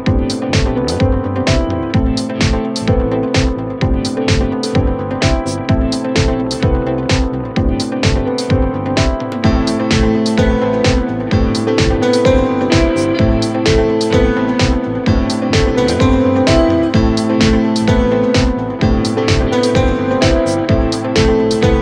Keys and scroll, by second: 1.3 1, 1.6 6, 1.8 Return.